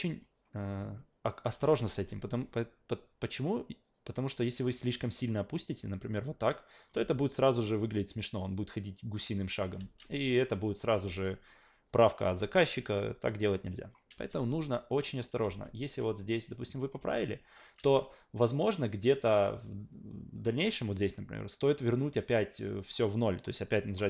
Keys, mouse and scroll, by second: 0.1 click, 3.9 click, 6.8 click, 7.0 alt+v, 9.8 alt+v, 11.0 ctrl+z, 11.9 ctrl+z, 13.8 click, 14.2 alt+v, 15.4 alt+v, 16.3-16.9 drag, 17.0 alt+v, 17.8 alt+v, 18.3-20.4 drag, 21.8 click, 24.0 alt+middle click.